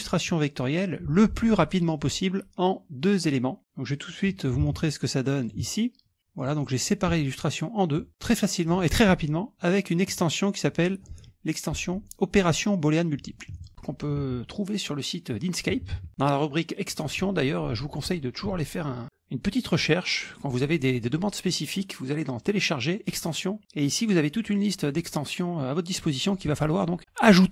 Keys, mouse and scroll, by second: 4.7 alt+Tab, 5.5 alt+click, 6.2 click, 6.5 click, 7.4-9.1 drag, 10.1 click, 13.6 click, 14.2 alt+Tab, 15.8 alt+Tab, 16.0 alt+Tab, 16.5-17.6 scroll up 2, 23.3 click, 24.7-25.5 scroll down 3, 25.5-26.7 scroll down 2.